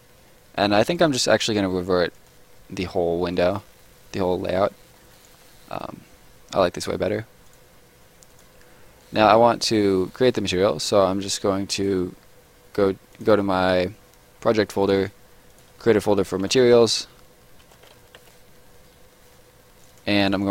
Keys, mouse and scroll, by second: 0.9 click, 4.7 middle click, 5.1 right click, 5.4 scroll up 1, 5.5 middle click, 7.5 click, 9.0 middle click, 9.7 right click, 10.0 middle click, 11.7 click, 13.5 right click, 14.8 click, 16.1 shift+click, 16.3-18.1 typing, 18.2 Return, 19.8 click.